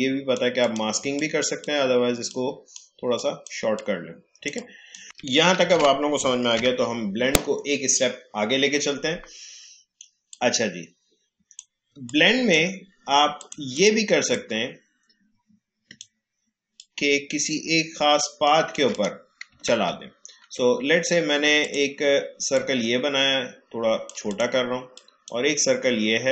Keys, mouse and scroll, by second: 1.4-4.6 typing, 3.1 click, 3.7 click, 4.5 click, 5.0 ctrl+z, 6.5 Delete, 10.2-16.7 drag, 19.7 ctrl+z, 21.6 click, 22.5-24.2 shift+drag.